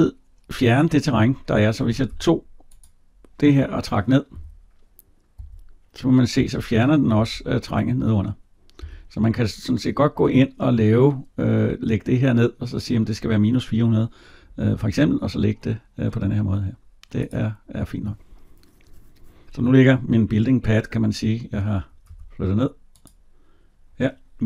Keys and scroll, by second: 1.7 Escape, 22.0 Escape.